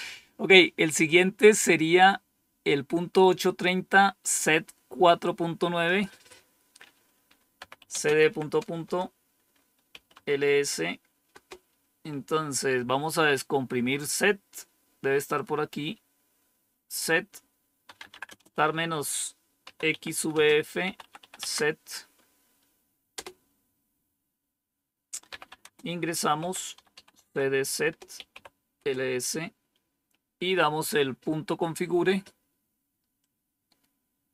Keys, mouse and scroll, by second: 5.7 click, 6.2 click, 7.2-11.2 typing, 17.5-21.6 typing, 23.0 Return, 24.9-29.2 typing, 33.1-34.3 drag.